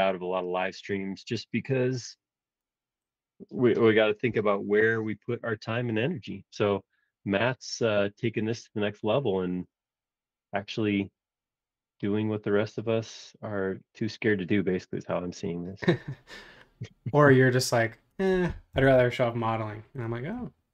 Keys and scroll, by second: 9.0 Return, 18.7 Return.